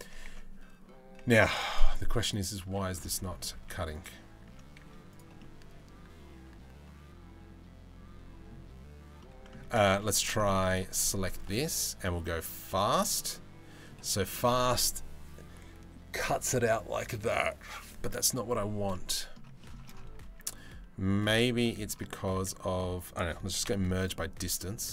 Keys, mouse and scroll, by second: 0.9 Tab, 1.3 click, 2.6 middle click, 3.3 Tab, 3.5 middle click, 4.1 Tab, 4.4 z, 5.0-8.1 middle drag, 8.9 middle click, 9.3 Tab, 9.5 z, 10.0 middle click, 12.0 click, 12.6-13.5 middle drag, 18.5-19.0 middle drag, 19.2 shift+middle drag, 19.9 Tab, 20.8 click, 21.3 middle click, 22.0 a, 23.3 m, 24.2 middle click, 24.8 z.